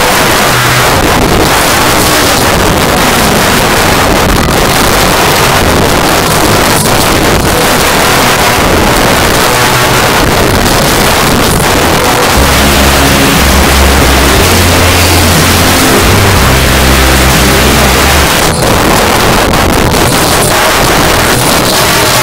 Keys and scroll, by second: 18.2 Page_Down.